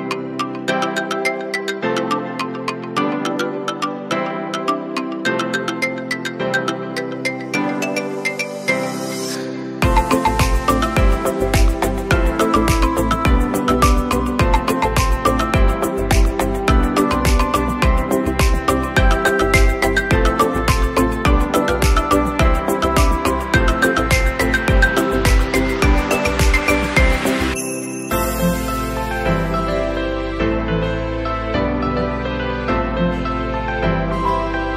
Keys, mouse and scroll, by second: 8.5 space, 8.6 click, 10.3 scroll down 1, 10.4 scroll down 1, 10.5 space, 10.6 click, 11.1 scroll up 2, 14.0 alt+scroll down 2.